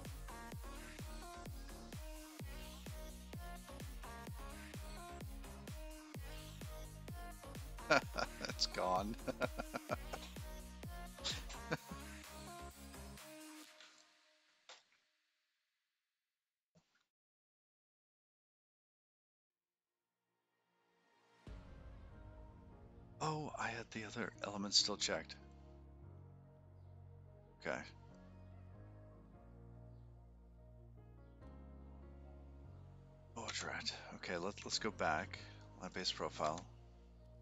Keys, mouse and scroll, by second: 9.3 typing.